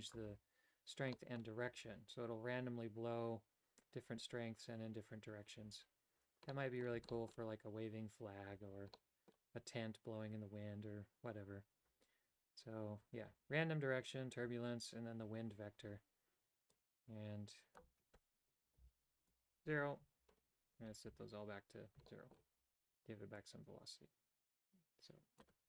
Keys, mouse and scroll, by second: 1.1 middle click, 6.5 middle click, 7.1 shift+middle click, 8.9 middle click, 16.7-20.2 drag, 21.0 a, 22.1 shift+middle click, 23.4-25.4 drag.